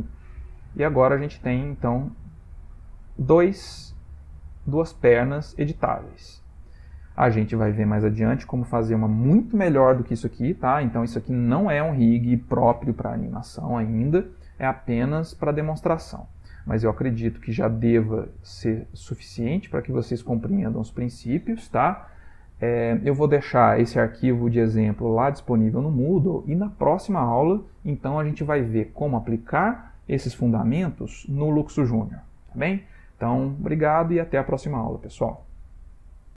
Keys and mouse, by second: 0.4 click, 0.6 g, 2.3 click, 2.5 g, 5.3 click, 5.6 g, 6.4-6.9 middle click, 6.6 middle click, 6.7 middle click, 7.2 ctrl+middle click, 7.4 middle click, 7.8 shift+middle click, 8.4 ctrl+middle click, 10.5 middle click, 14.8 middle click, 17.2 shift+click, 18.0 g.